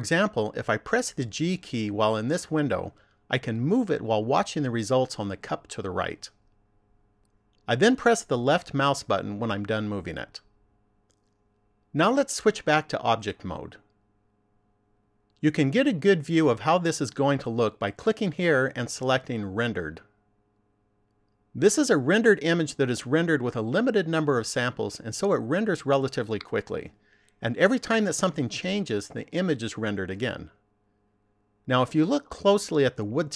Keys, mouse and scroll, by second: 1.3 g, 12.8 click, 14.3 click, 17.9 click.